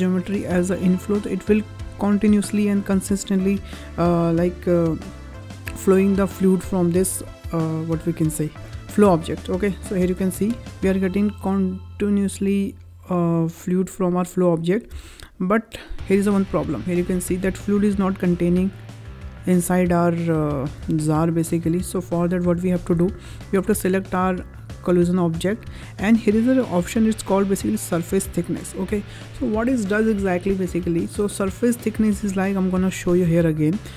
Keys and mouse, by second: 10.2 space, 10.6 space, 14.8 space, 15.8 click, 16.5 middle drag, 17.4 middle drag, 18.2 space, 20.5 space, 21.3 click, 22.0 middle drag, 22.6 shift+middle drag, 23.7 click, 32.6 click.